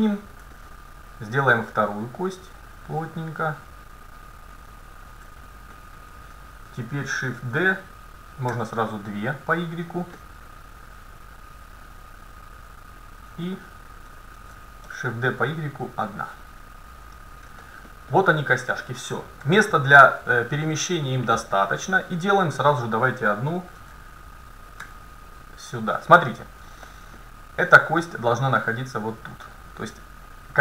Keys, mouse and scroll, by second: 0.0-0.6 scroll up 1, 0.6-2.8 middle drag, 1.8-3.6 drag, 4.7-6.5 right drag, 5.8-8.5 middle drag, 7.4 shift+d, 10.2-12.2 middle drag, 11.0-12.7 drag, 13.5-15.3 right drag, 14.4 shift+d, 17.7-18.8 middle drag, 19.5 a, 21.7-23.1 middle drag, 22.7-24.5 right drag, 23.8 shift+d, 26.9-28.2 middle drag, 28.2-30.2 drag.